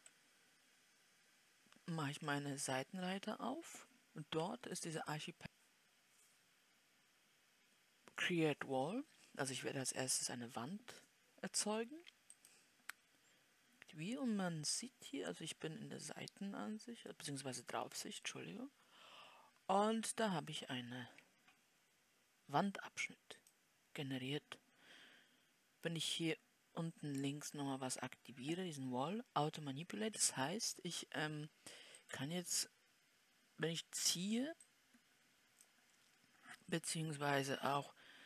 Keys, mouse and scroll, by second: 0.4 n.